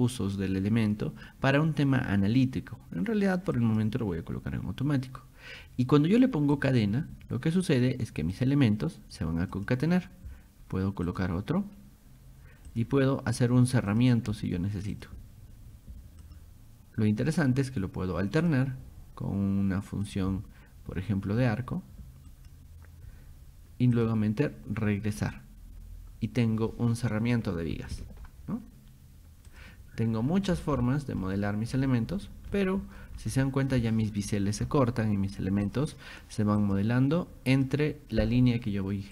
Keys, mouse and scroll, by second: 3.6 click, 6.6 click, 8.4 click, 9.6 click, 11.1 click, 12.7 click, 13.9 click, 14.9 click, 16.2 click, 18.5 click, 20.1 click, 22.3 click, 24.0 click, 25.2 click, 29.5 click, 30.1-30.7 scroll down 4, 31.2 shift+middle click, 32.1-32.4 scroll up 2, 32.5 shift+middle click, 33.2 middle click, 35.7 click, 36.6 click, 37.5 click.